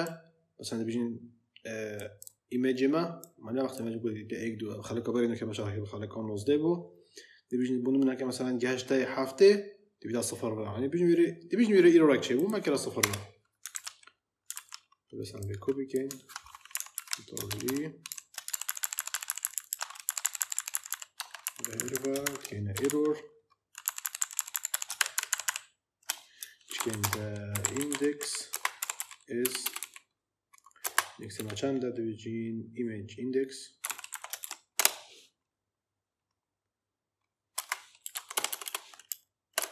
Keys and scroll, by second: 12.9 Return, 13.6 ctrl+v, 16.6 Right, 16.8 ctrl+d, 17.4 alt+shift+Down, 18.4 ctrl+Left, 19.9 Left, 21.1 Tab, 21.3 Right, 22.1 shift+Right, 22.6 e, 22.7 Right, 24.9 ctrl+shift+Right, 26.3-29.7 typing, 30.7 space, 31.3 shift+4, 33.5-34.8 typing, 37.4-39.7 typing.